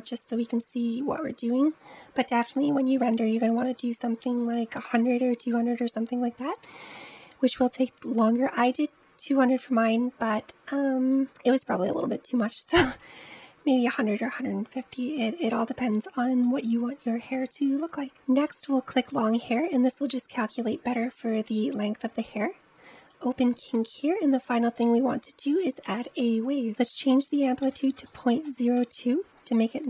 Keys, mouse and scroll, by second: 16.8-17.8 scroll down 2, 17.8 scroll down 1, 18.5 click, 21.2-22.8 scroll down 3, 22.8-23.2 drag, 23.2-24.5 scroll down 6, 24.5-29.3 drag.